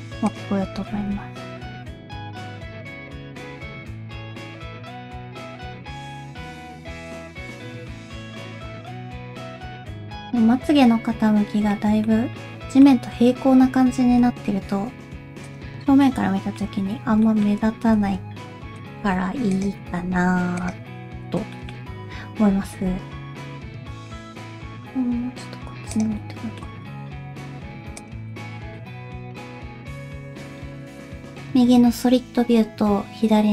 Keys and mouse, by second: 0.8 r, 2.1 middle click, 2.5-7.0 typing, 3.0 middle click, 4.1 middle click, 6.0 middle click, 7.5 middle click, 9.7-11.7 middle drag, 12.1 middle click, 14.1 g, 16.0 middle click, 17.3 shift+middle click, 17.9 r, 19.0 g, 19.8 r, 21.6 shift+middle click, 22.7 alt+a, 23.5 middle click, 24.3 g, 26.2 middle click, 26.8 g, 28.3 middle click, 29.1 g.